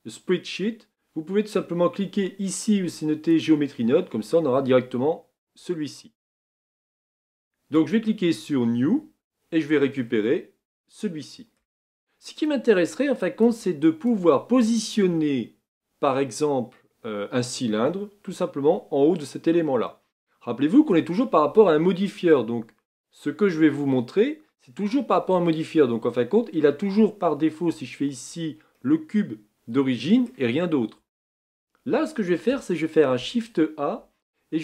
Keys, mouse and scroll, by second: 5.5 n, 7.4-19.9 drag, 19.9-27.7 middle drag, 27.7 Tab, 28.8-31.0 middle drag, 31.0 Tab.